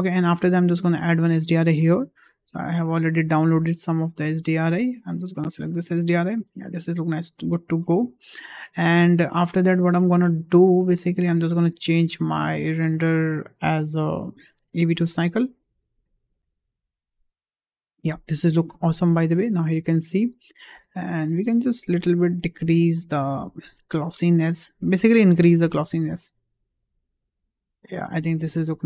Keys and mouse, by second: 1.0-1.3 drag, 6.9 shift+middle click, 8.2 shift+middle click, 12.0 click, 14.2-16.3 drag, 19.9-20.5 shift+middle drag, 21.1 click, 22.9 click, 26.0-28.1 drag.